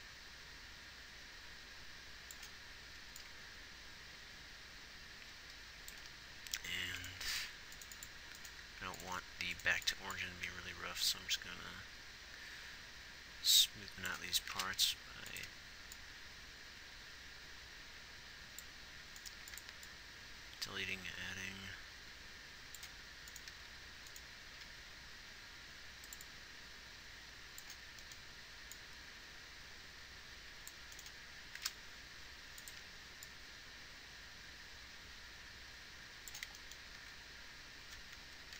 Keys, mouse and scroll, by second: 7.9 x, 19.6 x, 23.6 g, 24.7 g, 37.0 alt+a.